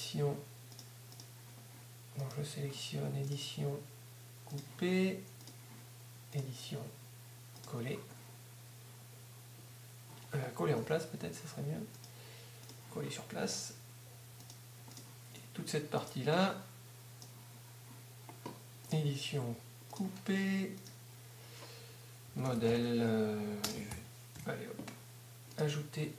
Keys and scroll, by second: 10.8 Up, 12.7 z, 22.5-24.4 typing.